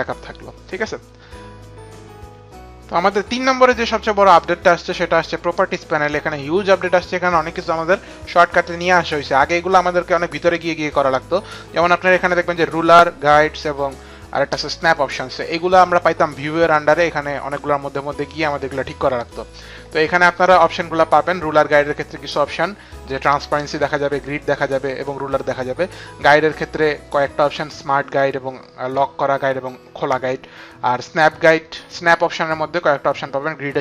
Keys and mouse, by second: 16.5 click, 19.1 click.